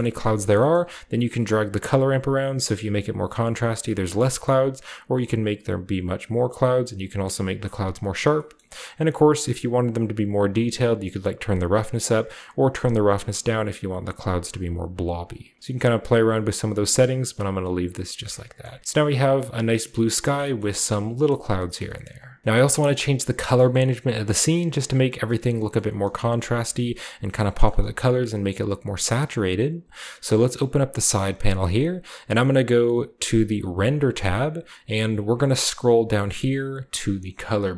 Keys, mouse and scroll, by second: 0.3-1.5 drag, 1.2 typing, 1.5-1.9 scroll down 1, 1.9-5.8 middle drag, 5.9-6.3 drag, 5.9-7.3 right drag, 7.3 middle click, 9.1 click, 9.7-11.2 drag, 14.5 middle click, 14.7 middle click, 16.1 click, 16.1 typing, 16.9 click, 17.4-18.1 scroll down 1, 18.2-18.6 typing, 18.4-18.8 middle drag, 18.4-18.7 scroll down 1, 18.7-20.6 scroll up 1, 19.8-20.2 middle drag, 20.5 shift+middle drag, 20.6 scroll down 1, 20.9 middle drag, 20.9-21.3 typing, 21.2 scroll up 1, 21.3 middle drag, 21.7 middle drag, 22.0 middle click, 22.3 scroll up 1, 23.2-23.6 middle drag, 23.2-24.7 scroll up 1, 23.7-24.3 middle drag, 25.1 middle drag, 25.2-25.9 scroll up 1, 25.4 middle drag, 25.7-27.1 middle drag, 25.9 scroll down 1, 26.1 typing, 27.1-28.1 scroll down 2, 27.6 middle click, 30.3 click, 32.6 click, 34.1 scroll down 1, 35.1 click, 35.4-35.8 scroll down 2.